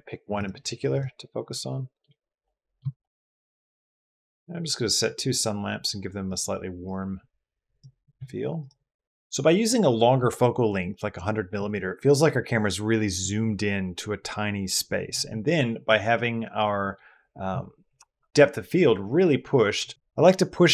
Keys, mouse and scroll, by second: 0.2 click.